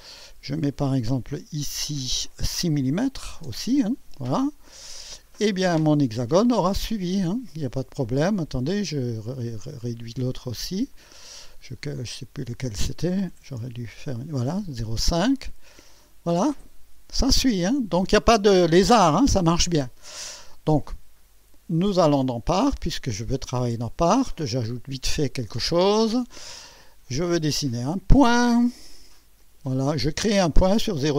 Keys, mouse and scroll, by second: 1.7 click, 3.1 KP_6, 3.4 Return, 5.1 click, 8.7 click, 10.9-11.7 drag, 12.3 click, 13.3 5, 13.6 Return, 15.4 click, 22.0 click, 22.8 click, 25.6 click, 27.6 click, 29.4 click.